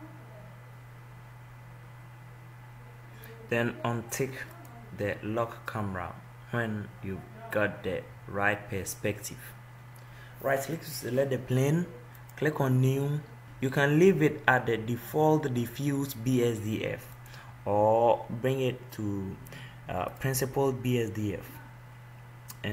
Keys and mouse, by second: 4.8-7.4 drag, 10.9-12.5 right drag, 19.9-21.6 drag.